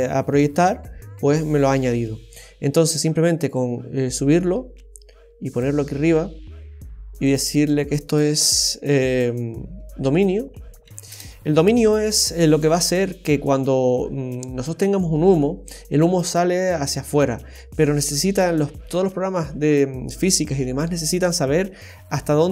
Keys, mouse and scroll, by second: 3.5 click, 7.2 click, 7.4 click.